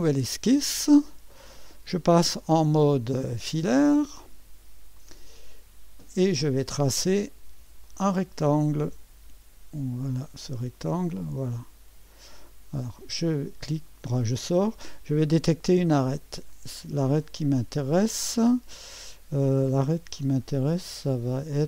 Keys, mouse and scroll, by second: 0.0 click, 4.1 click, 5.0 click, 5.7-6.6 scroll up 1, 7.8 click, 10.4 click, 12.1 click, 13.9 right click, 16.5 click, 20.6-21.5 scroll up 1, 21.5-21.6 scroll down 1.